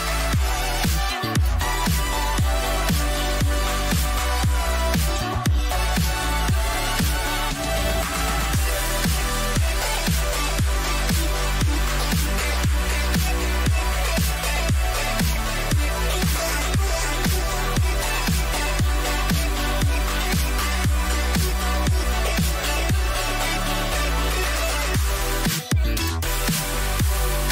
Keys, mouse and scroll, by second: 0.1 g, 12.3-14.5 middle drag, 15.1 s, 16.7 middle click, 18.2 z, 19.7 a, 20.2-24.2 middle drag, 26.8-27.5 right drag.